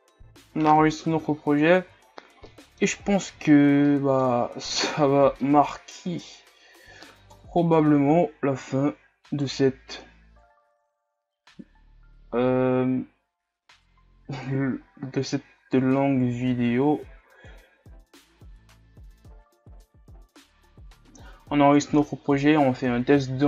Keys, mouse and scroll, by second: 0.3 a, 1.1 KP_0, 2.2 shift+scroll down 6, 2.5-3.0 middle drag, 3.0 scroll up 5, 3.5 shift+scroll down 7, 3.9-4.3 middle drag, 4.3 scroll up 6, 5.0 scroll down 1, 5.4-7.4 middle drag, 7.4 KP_1, 9.5-10.6 right drag, 10.6-16.3 drag, 16.3-17.5 scroll up 1, 17.5 scroll up 1, 17.7-19.6 drag, 19.6 KP_3, 20.9 a.